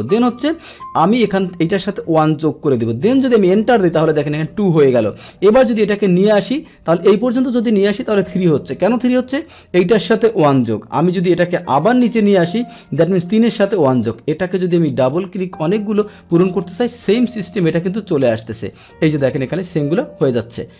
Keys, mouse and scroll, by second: 3.1 Return, 4.0 click, 5.1 click, 7.3 click, 8.0 Delete, 8.7 click, 8.9 click, 10.4 Return, 10.9 click, 11.8 click, 13.2 click, 13.4 click, 14.2 click, 14.8 click, 18.3 click, 20.3 click.